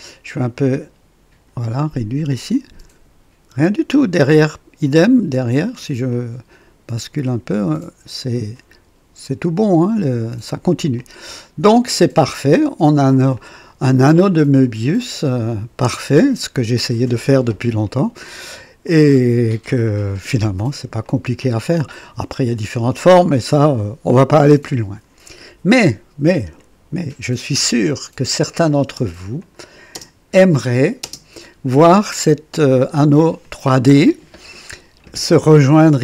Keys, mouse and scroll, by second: 0.3-1.5 drag, 4.1-6.0 drag, 6.1-8.6 drag, 10.9-11.6 drag, 12.5 click, 13.3 click, 15.0 click, 15.9-16.8 drag, 16.9 right click, 17.8 click, 18.9 click, 19.9 click, 21.0-21.8 drag, 23.6-25.2 drag, 28.3 click, 28.8 space, 29.4 click, 29.9-31.0 typing, 30.6 click, 32.2-33.1 drag, 33.4-35.1 drag.